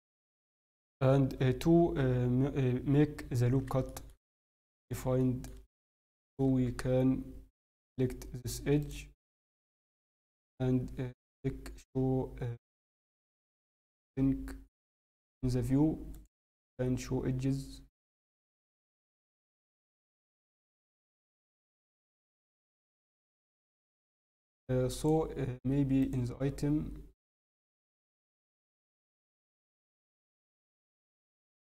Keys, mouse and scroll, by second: 3.8 shift+middle click, 4.3 shift+middle click, 4.6 scroll, 5.1 shift+middle click, 5.4 scroll up 9, 5.6 scroll, 5.9 scroll up 1, 6.0 shift+middle click, 6.7 scroll, 7.0 scroll down 4, 7.7 scroll, 7.7-8.1 scroll, 8.8 click, 9.3 scroll down 1, 10.2 click, 10.2 n, 12.9 click, 13.3 click, 14.7-15.2 scroll down 4, 16.1-24.4 click, 25.0 click, 26.0 click, 28.2 click, 29.8 click.